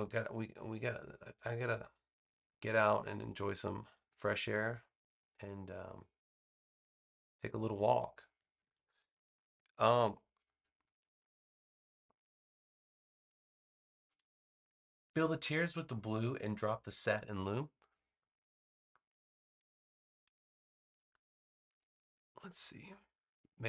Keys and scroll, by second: 8.5 super+s.